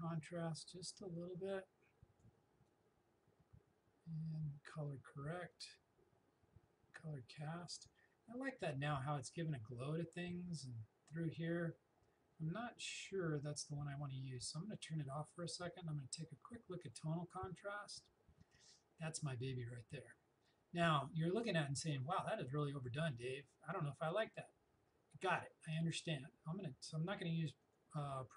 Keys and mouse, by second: 13.0 click, 15.5 click, 27.7 click.